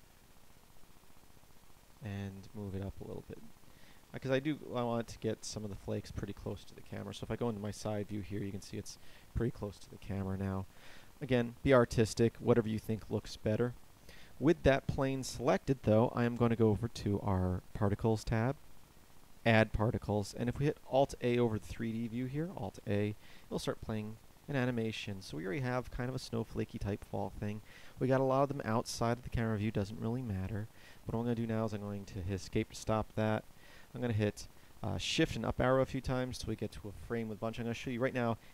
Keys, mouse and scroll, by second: 7.1 KP_3, 10.1 KP_0, 22.3 alt+a, 31.8 Escape, 33.2 Up, 33.3 Up, 34.0 shift+Up, 34.3-36.8 shift+Up.